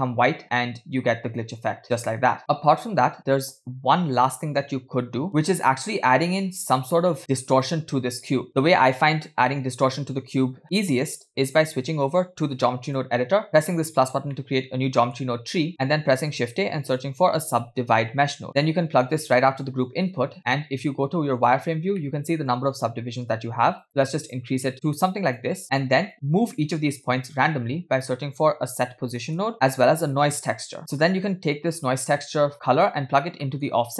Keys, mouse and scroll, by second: 0.7 space, 2.9 space, 3.3-3.9 scroll down 3, 3.7-4.3 scroll up 2, 5.3 click, 5.3-6.0 middle drag, 6.4 scroll down 1, 7.2 middle click, 7.6 drag, 10.0 middle click, 11.5-13.1 drag, 13.6 click, 14.3 middle click, 15.5 middle click, 15.7-16.1 scroll up 2, 16.2 shift+a, 20.4 click, 21.7 click, 22.0 middle click, 23.8 click, 24.3 click, 25.1 click, 26.1 click, 27.3 shift+a, 29.9 middle click, 30.4 shift+a, 31.8-32.7 drag, 33.5 middle click.